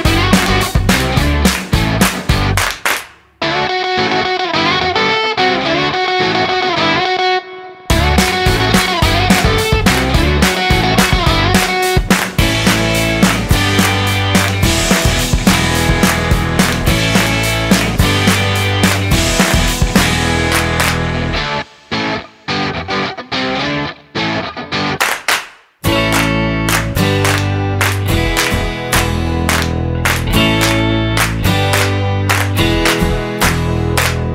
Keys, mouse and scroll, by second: 1.4 click, 3.0 click, 7.6 middle click, 8.6 scroll down 3, 9.1 middle click, 12.8 shift+z, 14.0-14.5 scroll up 5, 14.6-15.1 scroll down 2, 15.3 middle click, 15.8 scroll down 1, 18.2 right click, 21.6-22.1 scroll down 6, 22.9 scroll up 1, 23.5 scroll up 1, 28.9 click, 33.1 click.